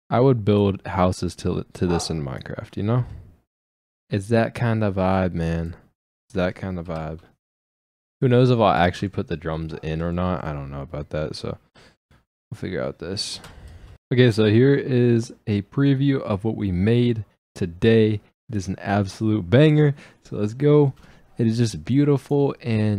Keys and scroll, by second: 6.8 ctrl+shift+Up, 7.3 ctrl+Up, 7.7 ctrl+b, 13.3 ctrl+space.